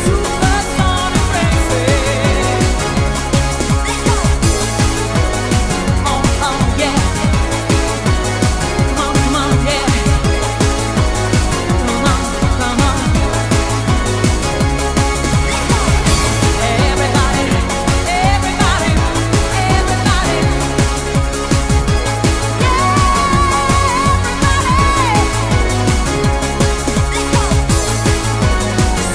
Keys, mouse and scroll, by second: 6.0 click, 9.7 click, 11.4 click, 19.3 typing, 24.6 click, 26.4 click, 28.3 click.